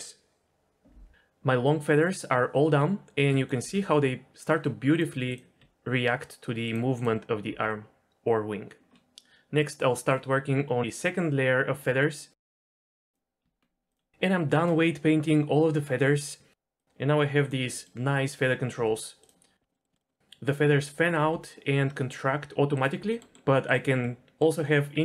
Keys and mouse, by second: 3.3 middle click, 3.6 r, 4.9 click, 5.3 click, 5.6 r, 6.7 click, 7.5 r, 9.7 middle click, 12.6 Tab, 13.3 click, 13.6 Tab, 14.8 r, 16.3 r, 16.8 z, 17.6 click, 18.0 click, 19.0 r, 19.6 r, 19.9 shift+middle click, 21.4 r, 23.0 middle click, 23.9 middle click, 24.2 middle click.